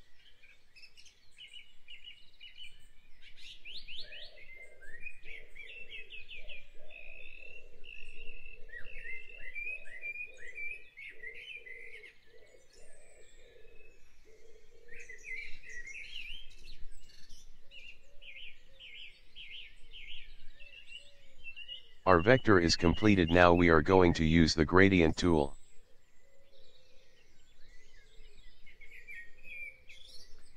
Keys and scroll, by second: 6.7 ctrl+z, 7.2 ctrl+z, 7.8 ctrl+z, 8.3 ctrl+z, 8.6 ctrl+z, 8.9 ctrl+z, 19.2 v.